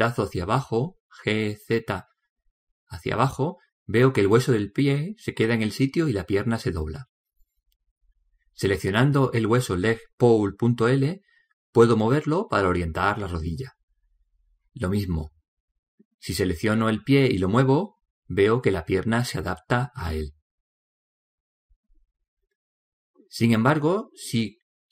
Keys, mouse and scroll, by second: 0.1 click, 10.6 right click, 12.9 g, 18.6-19.7 right drag, 19.7 click.